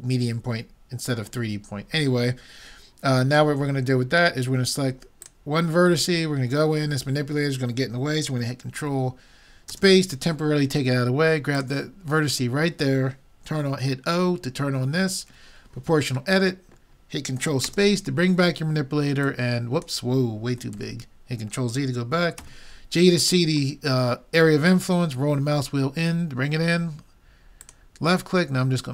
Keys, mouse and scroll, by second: 5.2-6.9 drag, 6.9-9.7 middle drag, 9.8 ctrl+space, 11.6-13.4 drag, 15.3 o, 17.7 ctrl+space, 19.3-21.1 drag, 20.7 ctrl+z, 22.4 g, 28.8-28.9 drag.